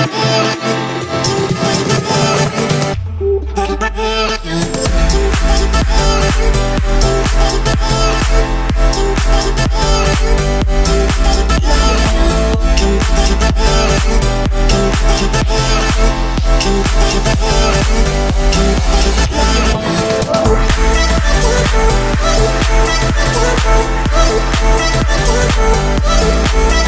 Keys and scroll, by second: 6.2 Return, 10.6 Return, 11.0 Escape, 12.0 Escape, 15.7 Return, 16.0 Escape, 19.0 1, 20.1 0, 20.7 Return.